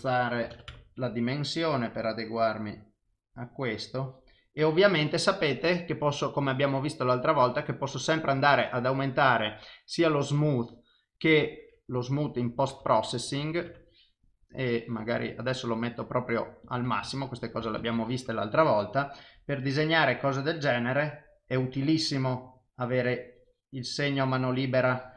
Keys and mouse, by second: 1.7 click, 5.7 click, 8.9 click, 15.6 click, 20.0 click, 20.1 click, 22.8 click.